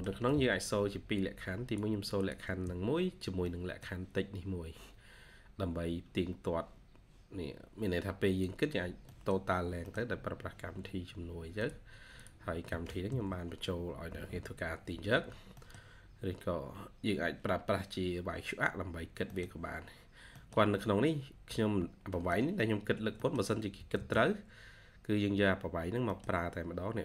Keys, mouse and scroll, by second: 0.0 1, 0.8 scroll up 1, 1.1 1, 2.9 scroll down 1, 3.2 1, 3.4 middle click, 3.8-4.4 scroll down 1, 4.4-4.7 scroll up 1, 7.0-7.9 scroll down 1, 7.9 scroll up 1, 9.0 middle click, 9.8-10.2 scroll down 1, 10.9-11.9 scroll up 1, 14.8 Escape, 15.0 Escape, 15.4 scroll down 1, 15.5 middle click, 16.4-17.4 scroll up 1, 18.8 scroll down 1, 19.0 scroll up 1, 19.2 middle click, 19.7-20.1 scroll up 1, 20.3 middle click, 20.4 scroll down 1, 20.7 scroll up 1, 21.6 scroll down 1, 22.0 middle click, 23.2 middle click, 23.7 typing, 25.9 middle click.